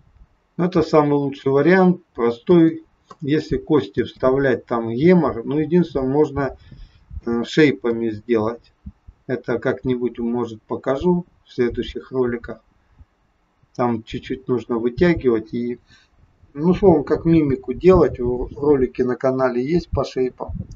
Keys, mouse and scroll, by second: 2.6 space, 3.9 space, 7.2 space, 7.9 space.